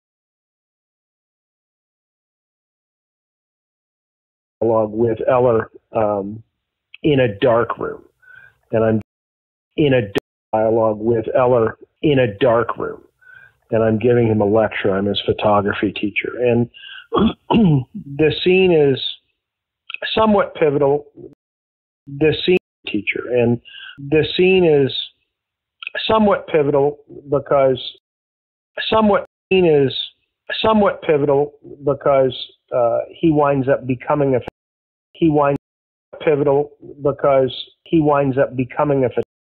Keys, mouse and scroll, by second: 0.9 click, 2.0 click, 2.8-4.0 drag, 4.4 click, 4.5 space, 6.2 ctrl+s, 7.7-8.9 drag, 8.9 space, 9.4 ctrl+shift+Delete, 9.6 space, 10.1 space, 10.3 click, 10.4 space, 12.5 click, 13.2 click, 14.3-15.7 drag, 16.0 click, 16.8 click, 17.9 click, 19.1-21.2 drag, 21.2 space, 21.7 ctrl+shift+Delete, 22.0 space, 22.5 space, 22.7 click, 22.7 space, 26.8-27.9 drag, 27.9 space, 28.5 ctrl+shift+Delete, 28.7 space, 29.1 space, 29.3 click, 29.4 space, 31.4 ctrl+s, 33.5 click, 34.4 space, 34.9 ctrl+shift+Delete, 35.0 space, 35.5 space, 35.7 click, 36.0 space, 38.6 click, 39.1 space.